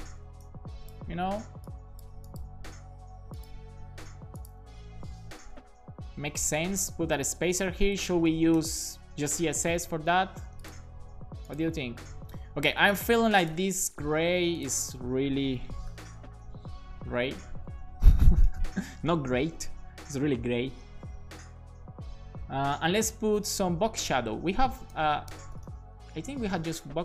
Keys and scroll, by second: 5.0 super+Right, 5.4 Return, 6.6 shift+,, 7.7 shift+super+Left, 8.3 BackSpace, 8.7 super+s, 15.9-16.7 typing, 17.7 BackSpace, 18.4 2, 19.9 super+s, 23.3 Down, 24.0 Tab, 24.5 BackSpace, 24.9 space.